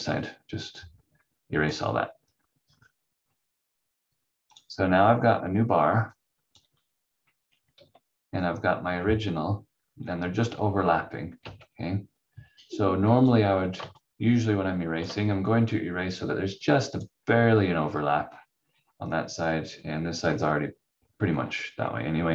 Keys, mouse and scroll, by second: 0.0 click, 2.8-3.5 scroll up 1, 4.5 click, 6.9-7.6 scroll down 1, 7.7 ctrl+z, 8.4 scroll up 1, 11.4 v, 13.2 click, 14.0 shift+click, 17.8 scroll down 1, 19.7 scroll up 1.